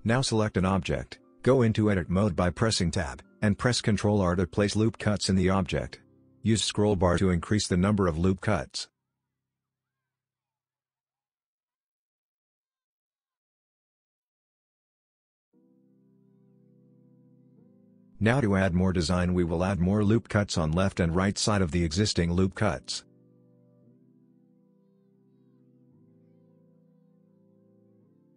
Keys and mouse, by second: 1.7 click, 3.7-4.9 middle drag, 5.8 Tab, 6.1 middle click, 7.7 ctrl+r, 11.7 middle click, 12.6 middle click, 13.2 middle click, 19.5 ctrl+r, 26.5 ctrl+r.